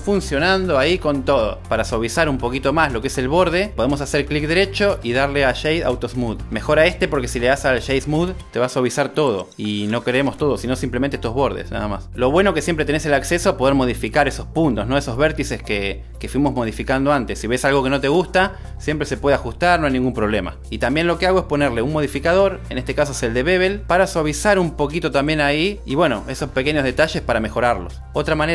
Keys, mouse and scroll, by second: 3.2 Tab, 6.4-8.8 right drag, 13.9 super+Tab, 16.7 drag, 17.8 drag, 19.9 click, 20.2 click, 22.7-26.1 drag.